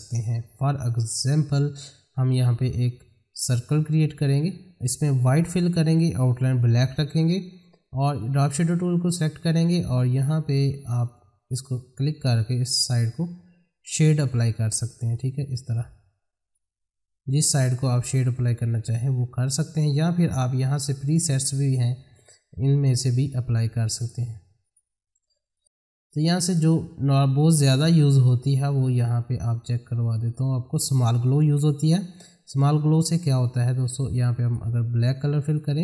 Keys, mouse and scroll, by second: 2.7-5.4 drag, 6.2 right click, 6.3 right click, 8.2 click, 11.0-15.1 drag, 15.1-16.5 drag, 16.8-20.2 drag, 28.5-29.8 scroll down 1, 29.8 click, 34.4 click.